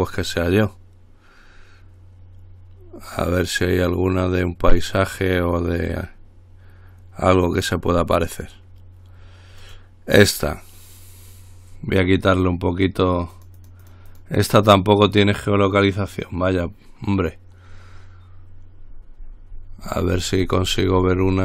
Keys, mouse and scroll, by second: 9.9 click, 13.3-14.9 drag, 18.8-21.4 scroll down 3.